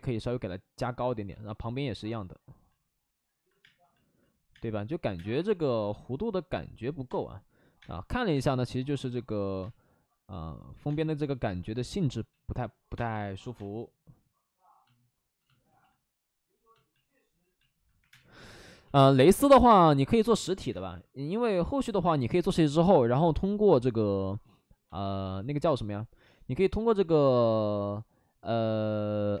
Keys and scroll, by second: 3.5-5.3 typing, 7.0 space, 7.4 ctrl+z, 8.3 space, 9.5 space, 10.8 space, 12.2 ctrl+z, 12.8 space, 13.5 space, 16.7 space, 17.9 3, 18.0 space, 20.6 space, 22.0 ctrl+z, 29.3 space.